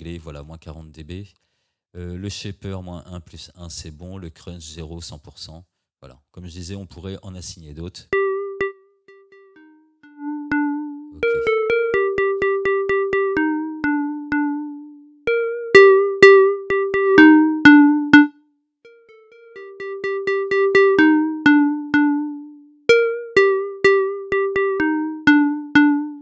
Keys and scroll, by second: 8.1 space.